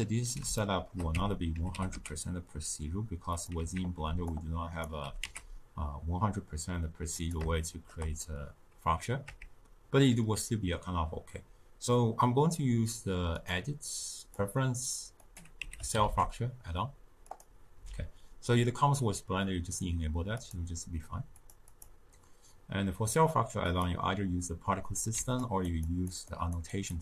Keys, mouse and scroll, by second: 1.0 Tab, 1.7 g, 3.7 alt+z, 4.7 click, 5.0 g, 7.5-9.2 shift+middle drag, 9.2 Tab, 14.6-20.5 drag, 23.8-27.0 drag.